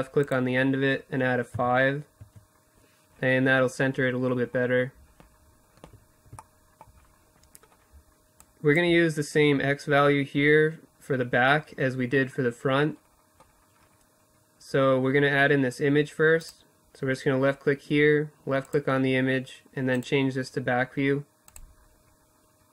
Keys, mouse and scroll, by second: 2.8 middle click, 4.8-6.8 middle drag, 6.8-8.6 drag, 13.5-14.9 middle drag, 14.9-16.4 drag, 18.3 click, 18.8-20.2 middle drag.